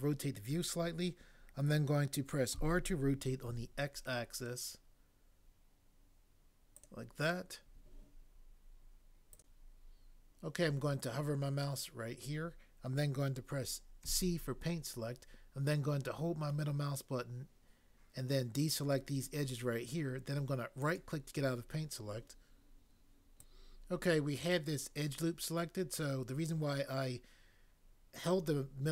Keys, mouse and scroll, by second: 2.5 r, 3.5 x, 14.1 c.